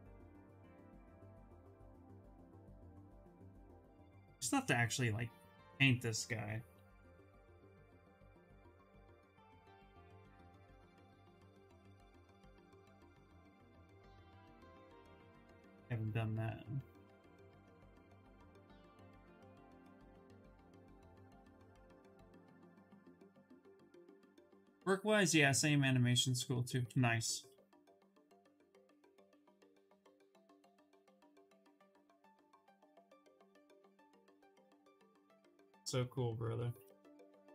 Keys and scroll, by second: 2.6-3.5 typing, 6.2 space, 11.0 ctrl+z, 11.2 ctrl+z, 11.3 ctrl+z, 11.5 ctrl+z, 11.8 ctrl+z, 12.0 ctrl+z, 12.1 ctrl+z, 12.3 ctrl+z, 12.5 ctrl+z, 12.7 ctrl+z, 12.8 ctrl+z, 13.8-15.7 typing, 25.9 s, 27.9 space, 36.7 s.